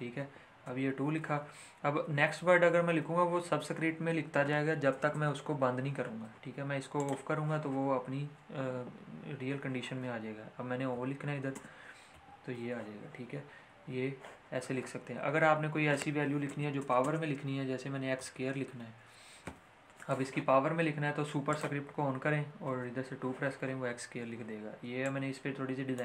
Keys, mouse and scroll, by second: 0.6 typing, 1.9-3.2 typing, 6.9 click, 6.9 click, 12.1 o, 13.8 o, 17.9-18.7 typing, 21.5 click, 22.6 2, 25.0-26.0 drag.